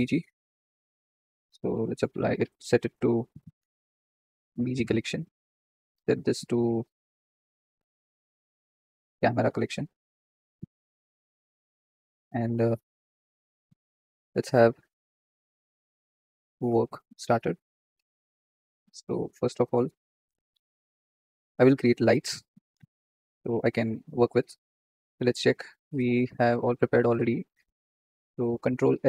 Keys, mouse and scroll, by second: 0.4-4.0 drag, 5.8 click, 12.6 click, 13.2 click, 17.1 click, 18.4 click, 28.9 ctrl+s.